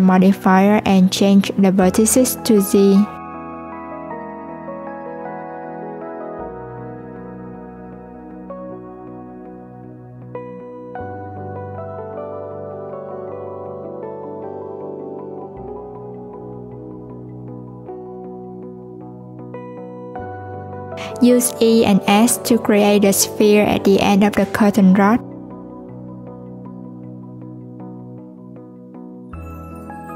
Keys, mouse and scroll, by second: 1.5 alt+z, 2.2 click, 3.3 x, 5.3 Tab, 6.7-9.7 drag, 11.1 click, 12.3 click, 12.7 click, 13.1 click, 14.2 Tab, 15.2 Tab, 16.5 click, 18.1-19.2 drag, 19.2-21.0 scroll up 1, 21.0 e, 27.8 e, 29.4 s.